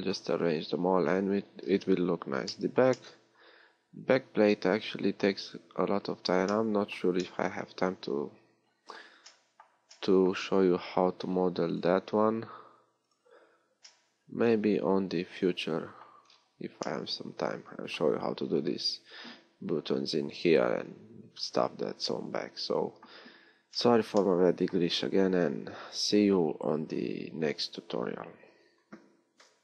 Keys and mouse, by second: 5.7-8.9 middle drag.